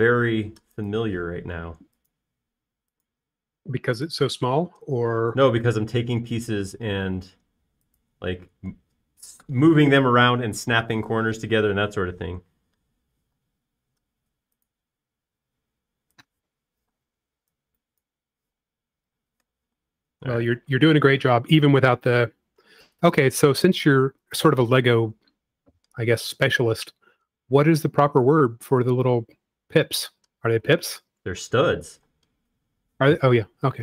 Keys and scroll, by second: 2.8 m, 5.6 space, 6.7 m, 10.2 space, 18.2-18.5 typing, 19.7-21.3 typing, 23.6 e, 25.2 typing, 31.0 space, 33.4 m.